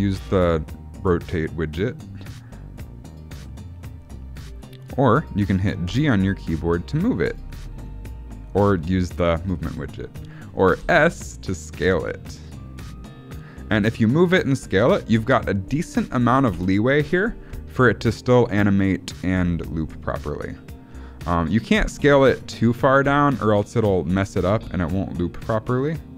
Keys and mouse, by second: 5.8 g, 7.6 r, 10.7 s, 16.4 space, 22.2 s.